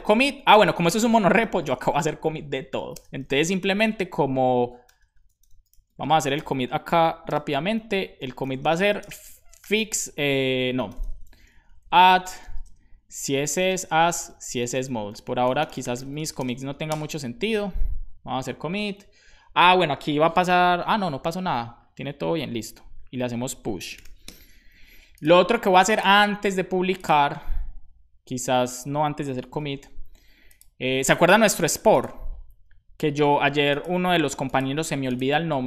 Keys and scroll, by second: 0.0-2.9 typing, 4.8 BackSpace, 7.3 super+b, 7.9-11.5 typing, 12.6-16.5 typing, 23.5-24.5 typing, 29.6 super+b.